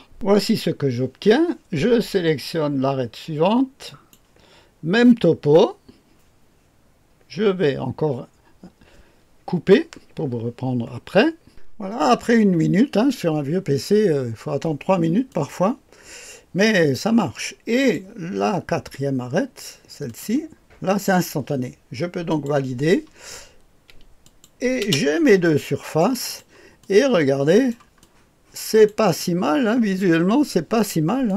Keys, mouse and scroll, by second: 0.1 click, 3.9 click, 15.3-18.0 drag, 20.0 click, 22.2 click, 24.2 click, 24.8 space, 25.4 click, 26.2-30.0 drag, 31.2-31.3 drag.